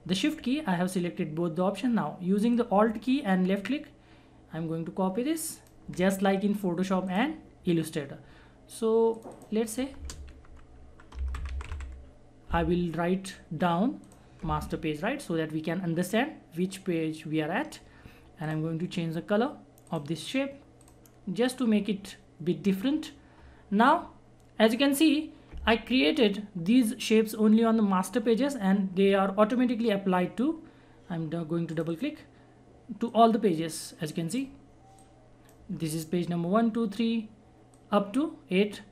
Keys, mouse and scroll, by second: 1.9 alt+Num_Lock, 1.9 shift+click, 2.5 shift+click, 2.6-7.0 alt+drag, 9.9-12.1 typing, 14.0 click, 18.4 click, 31.7-35.7 drag, 35.7-37.7 scroll up 1, 37.7-38.9 drag.